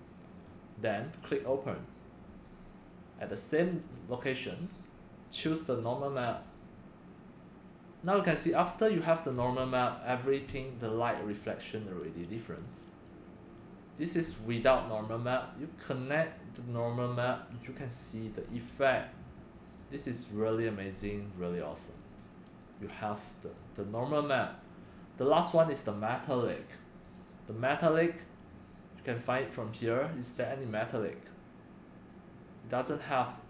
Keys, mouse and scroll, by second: 1.0-3.3 drag, 4.3 ctrl+v, 4.7 Return, 6.3 click, 8.3 scroll down 1, 8.3 click, 9.8-10.2 shift+drag, 12.7-13.3 drag, 14.2 scroll up 4, 14.3-16.2 drag, 16.4-17.6 drag, 18.3 click, 19.0-20.9 drag, 22.9-24.6 drag, 26.5 click, 27.8-32.2 drag.